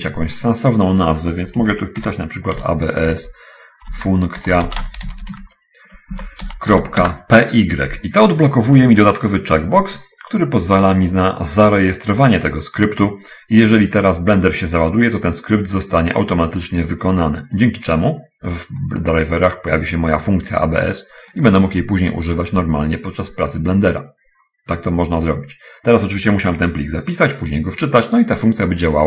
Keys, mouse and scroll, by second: 2.0-5.3 typing, 6.7 ., 7.4 Return, 7.4 p, 7.4 y, 9.5 middle click, 17.2 click, 18.9-21.4 drag, 21.7 click.